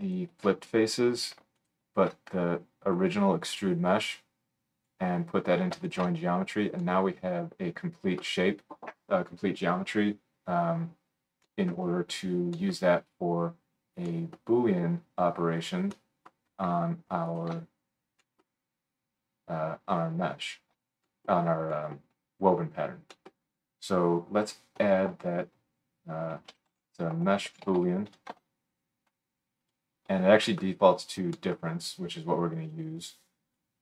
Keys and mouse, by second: 0.0 alt+shift+middle click, 1.4-3.0 alt+shift+drag, 1.6 alt+shift+middle click, 1.6 alt+shift+right click, 6.0-11.2 alt+shift+drag, 11.2 middle click, 11.2 right click, 11.6 click, 11.7-12.6 middle drag, 11.7-12.6 right drag, 12.6-13.3 drag, 13.3-18.4 right drag, 17.3 alt+shift+click, 17.3 alt+shift+middle click, 18.0 middle click, 18.4 drag, 18.6-23.2 right drag, 20.4 alt+shift+click, 20.4 alt+shift+middle click, 24.8 F3, 27.8 o, 30.6 middle click, 31.1 right click, 31.5 middle click.